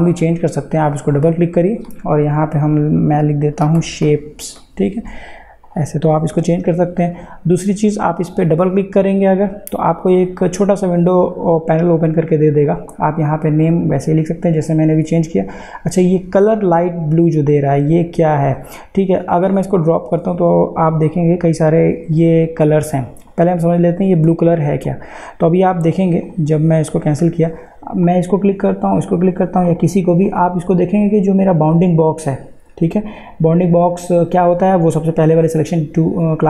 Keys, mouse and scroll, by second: 0.9 click, 2.9-5.2 typing, 5.7 click, 8.1 click, 18.3-23.0 drag.